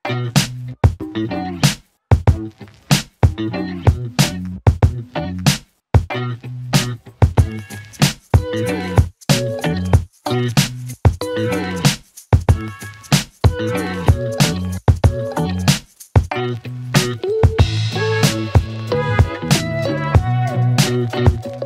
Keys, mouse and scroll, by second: 1.0-2.0 alt+click, 4.0 s, 4.8-9.1 click, 12.9-15.7 click, 20.1 ctrl+d, 21.3 click.